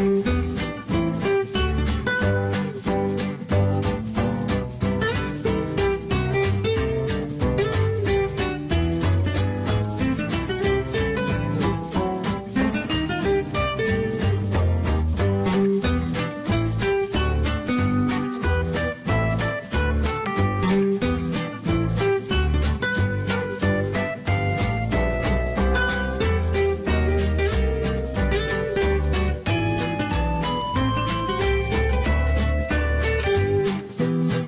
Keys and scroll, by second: 19.2-20.5 typing.